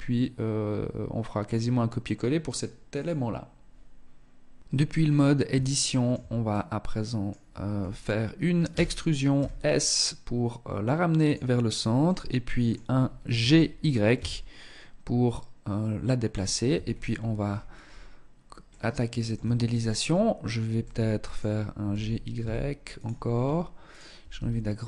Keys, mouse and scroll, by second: 3.6 Tab, 4.2-4.8 scroll up 4, 4.8 shift+middle click, 5.2-5.6 shift+scroll down 1, 5.6 middle click, 6.9-7.8 scroll up 2, 7.8 e, 11.2 middle click, 12.1-12.5 scroll up 1, 12.5 g, 15.8 Tab, 16.0-16.6 scroll down 7, 16.6-17.8 scroll up 9, 17.8 middle click, 17.8 scroll up 1, 18.5 Tab, 20.0 middle click, 21.0 g, 23.0 alt+right click, 23.5 s, 24.4 click.